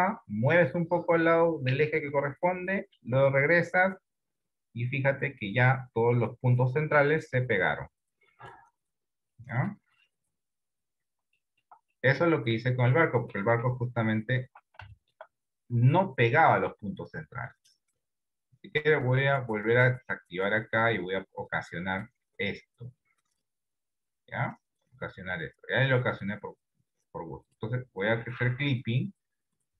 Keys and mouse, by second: 9.5 middle click, 10.9 Tab, 11.4 shift+middle click, 12.0 middle click, 13.7 KP_7, 14.5 Tab, 15.0 shift+middle click, 21.6 click, 23.0 click, 24.7 middle click, 27.5 click, 28.5 KP_1.